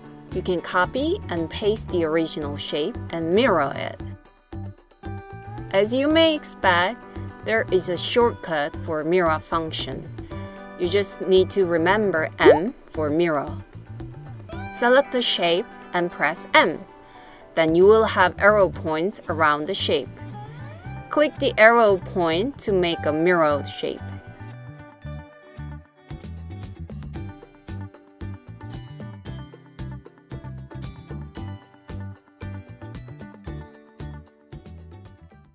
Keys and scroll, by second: 5.3 super+c, 5.9 super+v, 12.3 m.